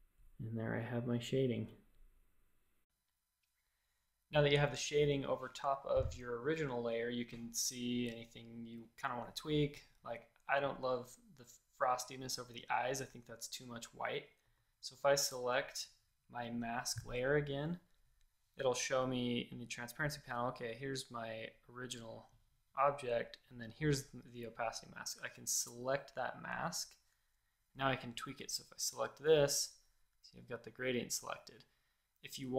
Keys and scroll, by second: 2.8 BackSpace, 14.4 v, 28.2 a.